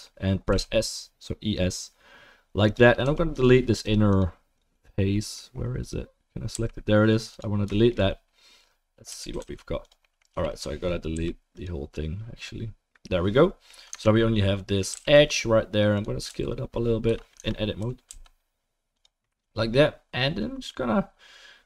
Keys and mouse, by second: 3.0 3, 4.1 click, 4.2 middle click, 4.7 click, 4.8 middle click, 5.8 click, 5.9-21.6 middle drag, 6.5 Delete, 9.1 a, 9.3 g, 10.3 3, 11.1 Delete, 13.9 Tab, 14.9 g, 16.3 s, 17.4 Tab, 17.8 a, 18.1 s.